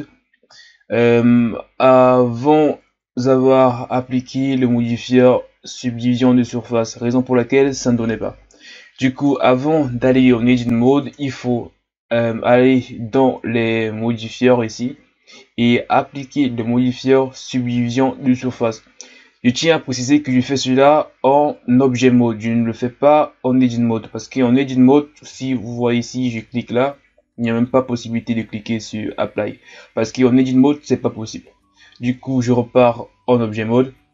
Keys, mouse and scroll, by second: 1.5-2.2 scroll up 2, 2.2-2.7 ctrl+scroll up 4, 2.8 Tab, 9.3 Tab, 11.0 Tab, 24.4 Tab, 26.2-29.3 drag, 32.1 Tab.